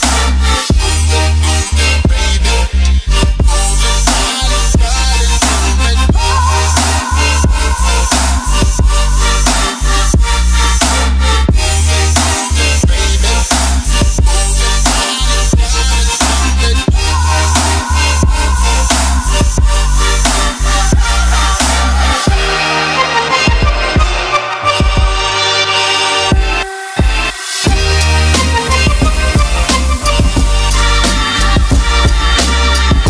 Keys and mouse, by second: 0.3 click, 0.7 click, 1.1 click, 1.7 shift+a, 4.2 ctrl+middle click, 4.7-5.8 ctrl+middle drag, 6.4 middle click, 6.8-8.3 drag, 8.6-9.3 drag, 9.7-16.5 drag, 16.9 ctrl+middle click, 17.4 ctrl+middle click, 17.7 middle click, 19.3 click, 19.3 right click, 21.3-23.4 drag, 21.3-23.4 right drag, 26.1 ctrl+shift+click, 27.1 click, 28.4 click, 28.9 middle click, 29.4 ctrl+middle click, 29.7 middle click, 30.3 click, 31.7 click, 32.4-33.0 drag.